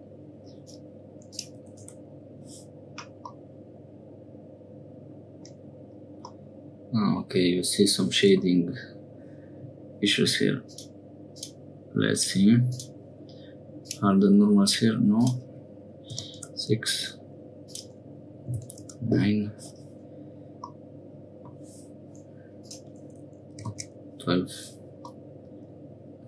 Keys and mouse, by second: 1.3-2.5 drag, 3.3-5.4 middle drag, 6.3 middle click, 10.7 click, 11.3 click, 12.7 click, 13.8 click, 14.6 click, 15.2-19.5 drag, 20.7 middle click, 22.6-24.5 drag, 25.1-26.2 middle drag.